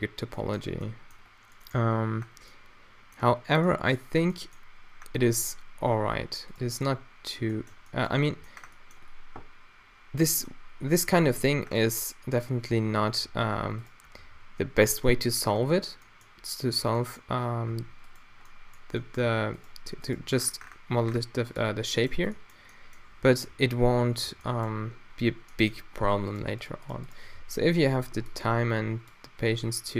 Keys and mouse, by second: 11.3 a, 12.7 a, 12.9 a, 13.2 ctrl+r, 14.2 ctrl+r, 16.8 Tab, 17.7 Tab, 18.0-18.5 drag, 18.7-20.0 drag, 19.2 g, 20.2 click, 20.2 g, 22.1 Tab, 23.3 z, 24.3 Tab, 27.3 q, 28.0 a, 28.2 b, 29.4 q.